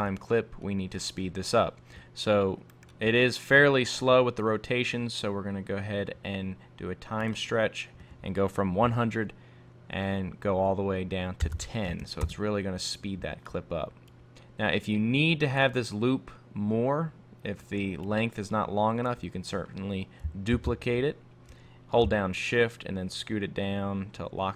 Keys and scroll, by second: 12.2 Return, 20.6 super+d.